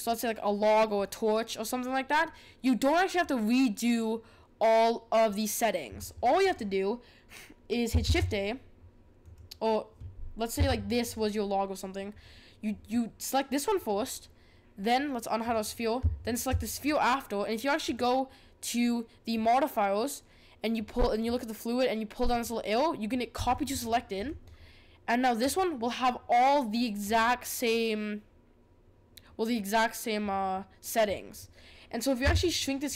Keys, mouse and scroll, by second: 6.5 click, 9.3 shift+a, 10.5 g, 15.4 click, 16.2 shift+click, 23.5 click, 32.2 s.